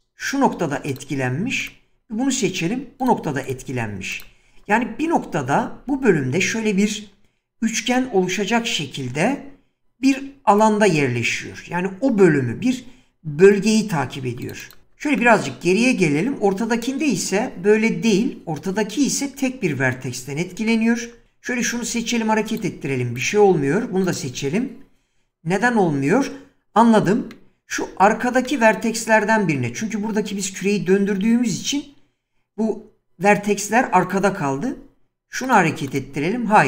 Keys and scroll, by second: 5.8 <, 21.8 g, 34.6 g.